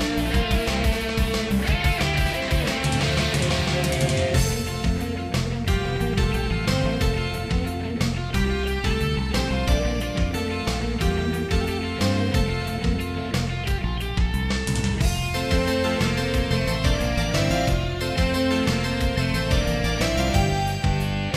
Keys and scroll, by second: 0.2 ctrl+z, 4.1 ctrl+z, 5.5 ctrl+s, 6.8 ctrl+z, 7.5 ctrl+z, 7.8 ctrl+z, 8.9 ctrl+z, 9.4 ctrl+z, 14.1 ctrl+z, 15.1 ctrl+z, 16.3 ctrl+z, 17.1 ctrl+z, 17.8 ctrl+z, 18.1 ctrl+z, 18.3 ctrl+z, 20.1 ctrl+z, 21.1 ctrl+z.